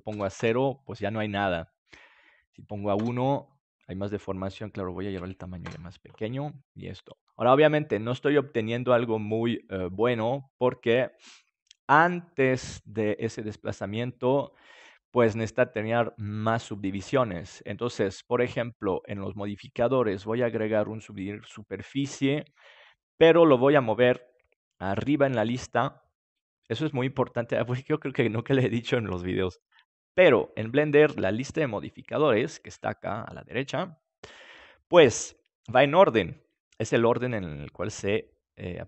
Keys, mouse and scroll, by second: 2.4-4.3 drag, 4.1-11.0 middle drag, 5.0-6.9 drag, 15.3 middle click, 19.0-21.4 drag, 24.8-29.6 drag.